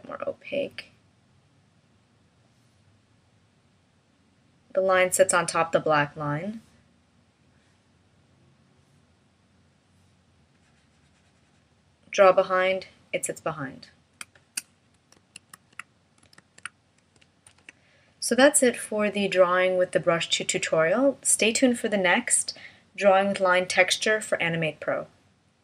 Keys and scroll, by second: 15.2 super+z, 16.4 super+z, 17.5 shift+m.